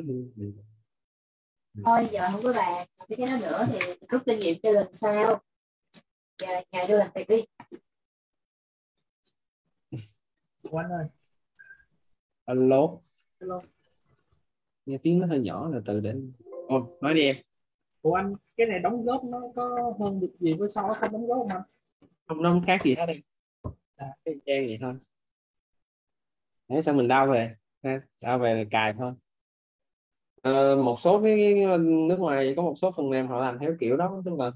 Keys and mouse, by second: 0.8 click, 15.3 click, 25.2 click.